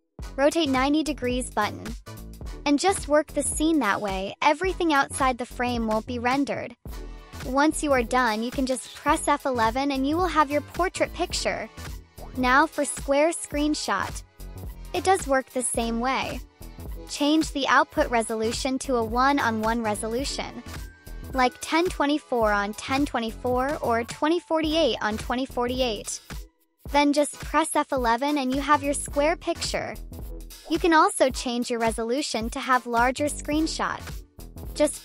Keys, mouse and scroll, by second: 0.5 click, 1.5 click, 2.7-4.1 right drag, 4.6-6.8 drag, 8.5 F11, 10.2 click, 10.3 click, 12.4 click, 13.2 1, 16.6 click, 17.3 click, 19.5 click, 19.9 click, 21.9-23.1 drag, 25.0 click, 25.6 F11, 27.7 click, 29.9-30.3 drag, 32.3 click, 34.1-34.7 drag.